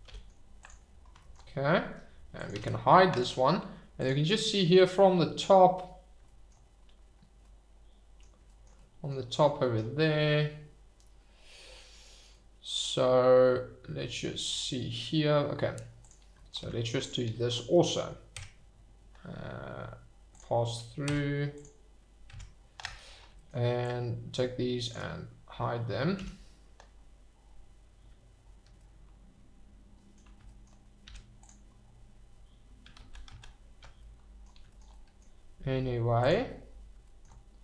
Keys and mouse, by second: 0.0 g, 0.6 click, 2.3 click, 2.5 h, 4.6 shift+right click, 7.4-8.2 middle drag, 8.7-9.1 middle drag, 12.3-14.0 middle drag, 16.6 Tab, 17.5 shift+middle click, 18.3 Tab, 21.0 Tab, 22.3 Tab, 23.8-24.9 drag, 26.2 h, 28.7-30.1 middle drag, 31.0 Tab, 33.0 ctrl+z, 33.2 ctrl+z, 34.0 click, 36.2 click, 37.1 shift+middle click.